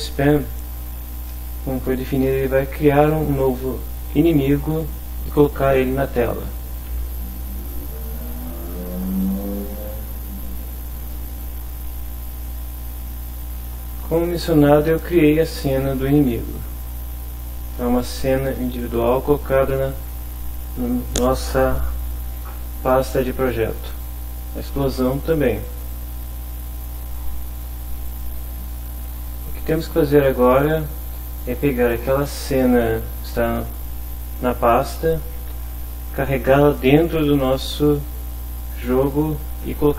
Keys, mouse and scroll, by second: 1.3-2.5 middle drag, 7.0 alt+Tab, 12.3 click, 15.5 click, 16.5 click, 19.9 click, 23.9 click, 25.7 click, 26.8 scroll down 2, 27.0 scroll up 2, 27.0 click, 28.1 click, 29.8 click, 31.6-33.0 drag.